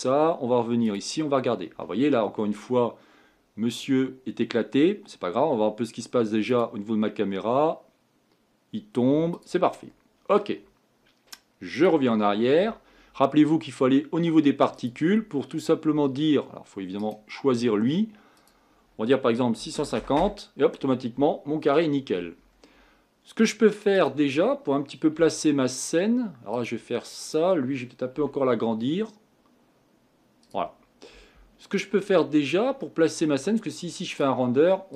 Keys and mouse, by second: 0.9 click, 7.0 click, 9.5 click, 11.9 click, 17.0 right click, 23.9 right click, 25.1 g, 25.4 right drag, 27.2-28.8 right drag, 28.1 s.